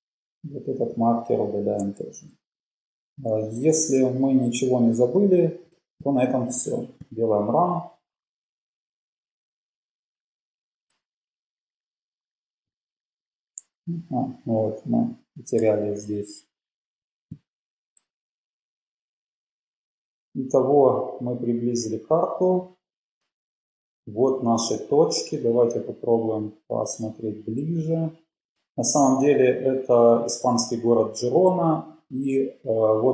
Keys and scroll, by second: 1.5 Page_Down, 2.2 shift+Page_Up, 2.5 shift+Page_Up, 3.3 shift+super+Left, 3.8 BackSpace, 5.1 Delete, 11.1 super+Down, 13.9 Left, 14.7 Left, 15.6 BackSpace.